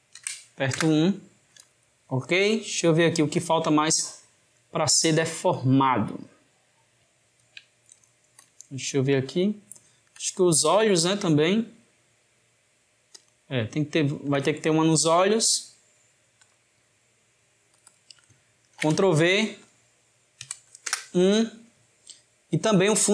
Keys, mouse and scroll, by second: 2.7-5.7 shift+middle drag, 7.8-12.5 ctrl+middle drag, 13.1 click, 14.0-15.4 ctrl+middle drag, 15.4-16.9 drag, 16.9-17.7 middle drag, 17.9-19.6 drag, 19.7-22.6 drag.